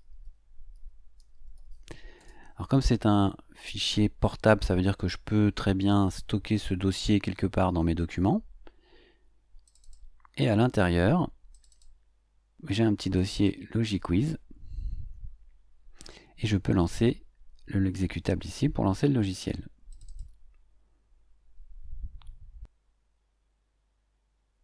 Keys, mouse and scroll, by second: 0.0-2.0 typing, 2.2 Return, 9.6 click, 11.5 click, 13.1 click, 15.3-16.1 scroll down 4, 19.9 click.